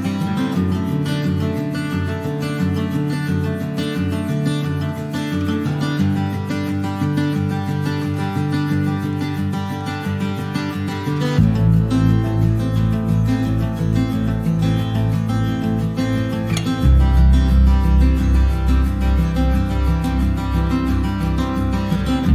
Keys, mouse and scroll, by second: 0.0 click, 2.0 alt+middle click, 2.8 alt+middle click, 3.6 scroll up 4, 4.0-5.5 shift+middle drag, 5.5 ctrl+a, 6.4 middle click, 6.8 ctrl+s, 7.1 shift+middle click, 7.4 Tab, 7.7 middle click, 7.8 scroll up 3, 8.1 scroll down 1, 8.1 shift+middle click, 8.3 scroll up 1, 9.0 ctrl+r, 10.1 alt+middle click, 10.7 shift+middle click, 11.3 click, 11.6 middle click, 12.2 click, 13.0 3, 13.1 click, 13.5 shift+click, 14.2 2, 14.4 click, 14.9 shift+click, 15.7 alt+middle click, 16.0 alt+middle click, 16.6 click, 18.4 middle click, 18.8 alt+z, 19.0 click, 19.2 scroll down 3, 19.4 middle click, 19.6 scroll up 1, 19.8 alt+z, 19.9 click, 20.1 Tab, 20.3 middle click, 20.5 scroll up 1, 20.8 ctrl+s, 21.0 click, 21.3 alt+middle click, 22.2 scroll down 2.